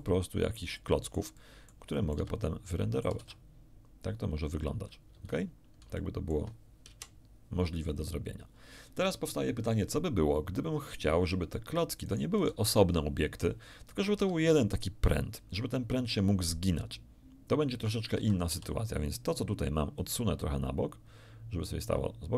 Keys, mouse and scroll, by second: 2.1 Escape, 2.1 middle click, 2.6 middle click, 3.2 alt+a, 5.1 Escape, 5.9 shift+middle click, 6.8 shift+KP_1, 12.0 middle click, 12.3 g, 14.1 Escape, 18.1 a, 18.4 a, 19.9-22.0 drag.